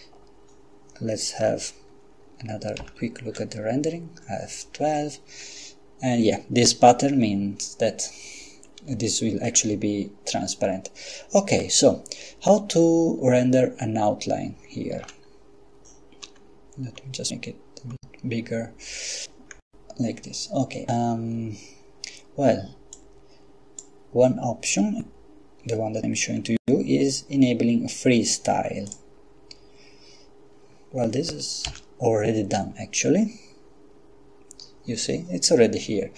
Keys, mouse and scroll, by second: 2.8 F12, 15.0 Escape, 16.4-17.5 scroll up 4, 18.0-18.5 scroll up 2, 19.8-20.2 scroll down 2, 23.0 click, 28.9 click, 31.7 F12.